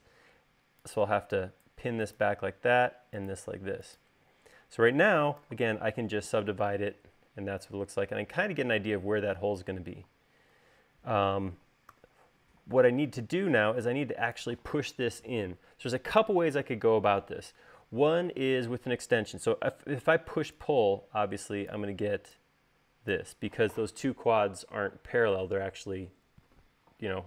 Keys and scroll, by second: 4.6 u, 5.6 u, 12.3 u, 20.5 p.